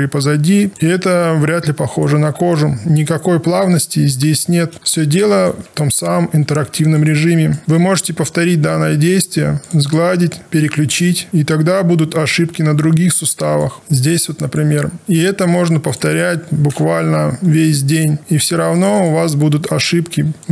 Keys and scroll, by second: 17.0 Down.